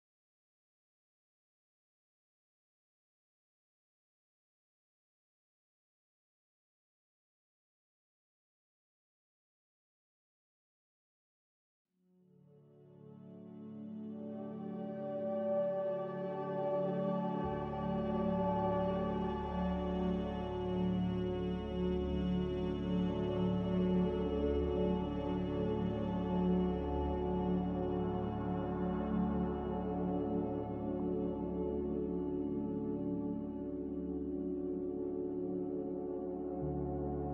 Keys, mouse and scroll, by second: 4.6 a, 5.6 5, 5.7 Return, 6.9 2, 7.1 Return, 23.9 g, 25.7 r, 29.4 a, 34.4 ctrl+c, 34.6 ctrl+v.